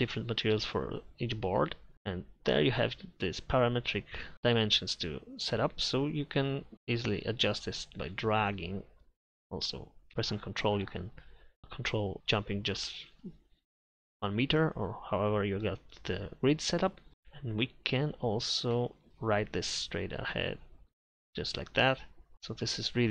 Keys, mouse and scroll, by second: 1.8 click, 5.2 click, 6.7 a, 18.8 a, 19.1 r, 20.9 a.